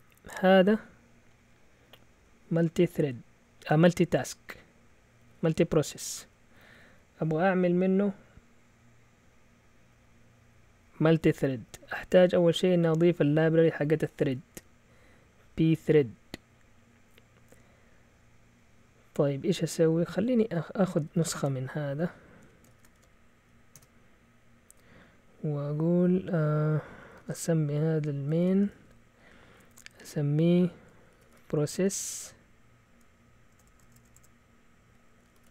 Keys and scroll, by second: 2.0 typing, 3.3-7.3 typing, 10.1-12.3 typing, 21.0 Escape, 21.5-24.2 typing, 22.4 Escape, 26.9-29.0 typing, 30.9-32.2 typing, 33.4-35.5 typing.